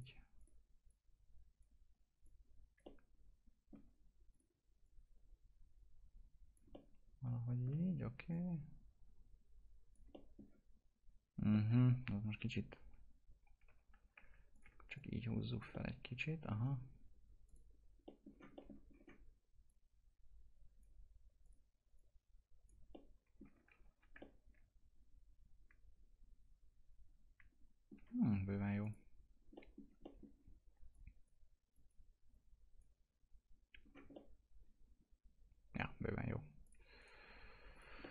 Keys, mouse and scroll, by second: 0.3-2.8 drag, 2.8-4.3 alt+middle drag, 4.3-6.7 drag, 6.7-8.3 alt+middle drag, 8.3 click, 10.1 alt+middle click, 11.5 alt+middle click, 12.0 ctrl+z, 14.5 ctrl+click, 14.9 click, 15.7-17.4 alt+middle drag, 17.4 click, 18.0 middle click, 18.2 scroll down 1, 18.5 middle click, 18.9-19.6 scroll up 1, 19.6 click, 22.9 alt+middle click, 23.7 ctrl+z, 24.1-28.8 alt+middle drag, 28.8 click, 29.5 middle click, 30.9-33.7 drag, 33.7 scroll down 1, 34.1-36.6 alt+middle drag, 36.6 click, 36.9 right click, 37.7 click, 38.0 middle click.